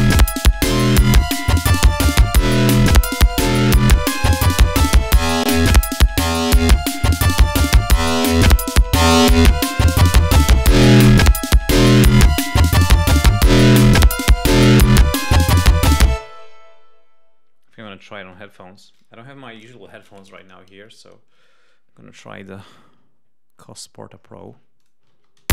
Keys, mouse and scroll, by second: 0.7 right click, 5.1 click, 7.0 click, 8.2 click, 9.2 click, 9.8 click, 10.5 click, 11.0 click, 12.3 click, 12.9 click, 13.4 click, 14.1 click, 15.1 click, 16.1 space, 24.8 click, 25.4 space.